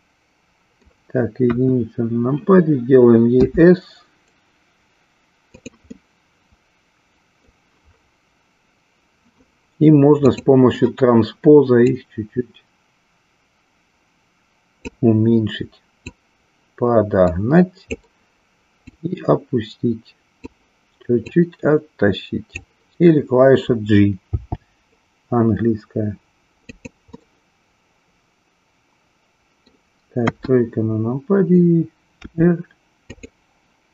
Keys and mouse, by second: 1.5 KP_1, 3.3 s, 5.6 click, 6.1-7.6 middle drag, 10.3 click, 12.0-15.1 drag, 16.0-18.0 drag, 18.7-20.3 drag, 21.4-22.7 drag, 24.2 g, 26.6 click, 27.2-29.7 middle drag, 30.4 KP_1, 32.2 r.